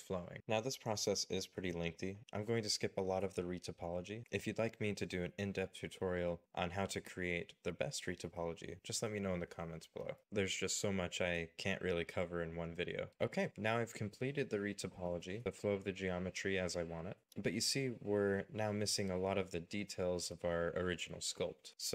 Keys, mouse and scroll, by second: 0.0 scroll down 1, 0.3 g, 0.4 g, 0.4 middle click, 0.8 g, 0.8 middle click, 1.3 middle click, 1.8 right click, 1.9 middle click, 2.0-2.3 scroll down 2, 2.1 middle click, 2.3 space, 2.4 middle click, 2.5 right click, 2.6 middle click, 2.8 middle click, 3.6 z, 3.9 right click, 4.1 right click, 4.2 middle click, 4.4 shift+middle click, 4.6 scroll down 1, 4.7 scroll up 1, 4.8 scroll down 1, 4.9 scroll up 1, 5.1 scroll down 1, 5.4 middle click, 5.6 scroll down 1, 5.8 middle click, 5.9 z, 6.0 shift+right click, 6.2 middle click, 6.4 middle click, 6.4 right click, 6.6 middle click, 7.0 scroll down 1, 7.0 middle click, 7.2 z, 7.3 scroll up 1, 7.5 shift+right click, 7.6 middle click, 7.9 Escape, 8.1 scroll, 8.4 right click, 9.3 right click, 9.5 middle click, 10.0 Escape, 10.1 g, 10.2 middle click, 10.6 right click, 10.9 middle click, 11.0 ctrl+z, 11.1 right click, 11.3 middle click, 11.5 scroll up 1, 11.8 middle click, 12.3 middle click, 12.4 scroll down 1, 12.5 scroll up 1, 12.6 scroll down 1, 12.9 middle click, 13.1 middle click, 15.6 shift+middle click, 16.0 shift+middle click.